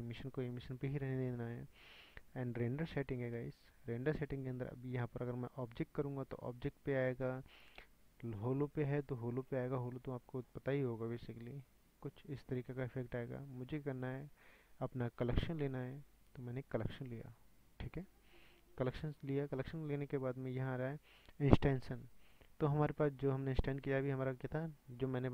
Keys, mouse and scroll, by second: 9.4-12.2 drag, 17.2-25.3 drag.